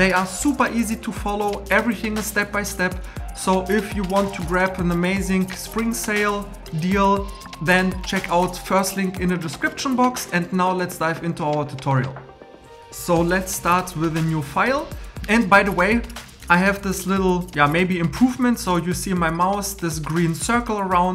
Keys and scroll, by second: 13.6 super+n.